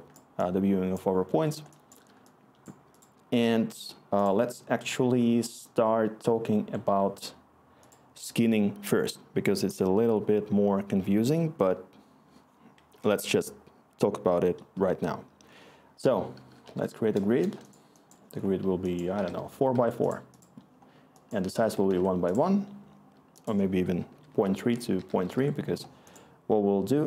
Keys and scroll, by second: 12.9 Tab, 15.8-17.1 typing, 17.2 Return, 18.8-19.5 typing, 19.7 Tab, 21.2-22.2 typing, 22.7 Tab, 23.8-25.7 typing.